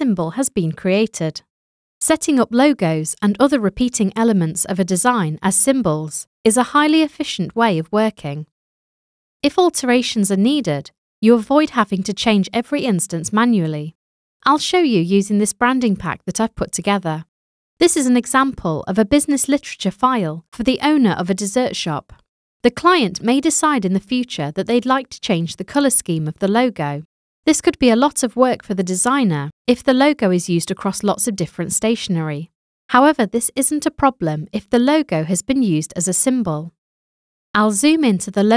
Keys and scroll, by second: 0.9 super+z.